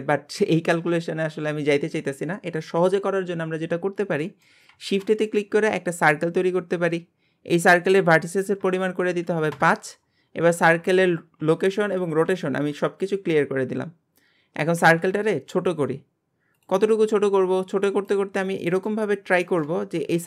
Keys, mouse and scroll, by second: 3.8-4.2 scroll down 1, 4.2-4.7 shift+middle drag, 4.7 shift+a, 7.0 scroll down 1, 7.9-10.4 drag, 10.4-11.1 scroll down 1, 11.1 alt+g, 12.2 alt+r, 12.8 scroll up 2, 13.4 scroll down 1, 13.9-14.8 scroll up 1, 14.8 s, 16.9-17.4 scroll up 4, 17.4 r, 18.3 scroll up 1, 18.6 shift+middle click, 19.1-19.4 scroll up 1, 19.4 shift+middle click, 19.8 scroll up 1.